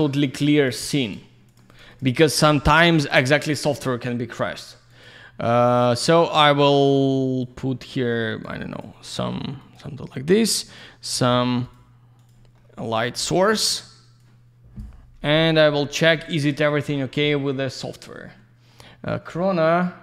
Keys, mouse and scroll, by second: 0.4 ctrl+shift+click, 0.6 ctrl+shift+click, 0.7 ctrl+shift+double click, 0.8 ctrl+shift+click, 0.9 ctrl+shift+click, 1.0 ctrl+shift+click, 1.1 ctrl+shift+double click, 1.5 ctrl+shift+click, 1.6 ctrl+shift+click, 1.7 ctrl+shift+click, 1.8 ctrl+shift+double click, 1.9 ctrl+shift+click, 2.0 ctrl+shift+click, 2.1 ctrl+shift+click, 2.1 ctrl+shift+double click, 2.3 ctrl+shift+click, 3.1 ctrl+shift+click, 4.9 ctrl+shift+click, 6.9 ctrl+shift+click, 7.4 ctrl+shift+click, 9.6 ctrl+shift+click, 10.7 ctrl+shift+click, 11.6 ctrl+shift+click, 12.2 ctrl+shift+click, 12.6 ctrl+shift+middle click, 12.9-13.2 ctrl+shift+scroll down 1, 13.2 ctrl+shift+middle click, 13.6 ctrl+shift+scroll up 1, 14.2 ctrl+shift+click, 15.1-15.7 ctrl+shift+scroll down 1, 15.7 ctrl+alt+shift+middle click, 16.1 ctrl+shift+middle click, 16.4 ctrl+alt+shift+middle click, 18.0 ctrl+shift+right click, 18.1 ctrl+shift+right click.